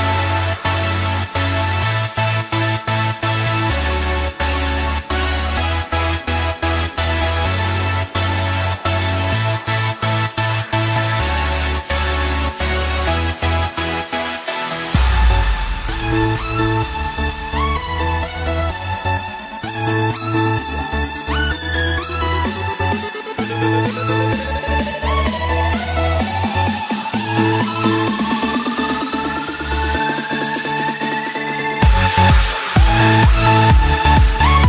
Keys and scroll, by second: 28.2 ctrl+alt+z, 29.0 ctrl+d.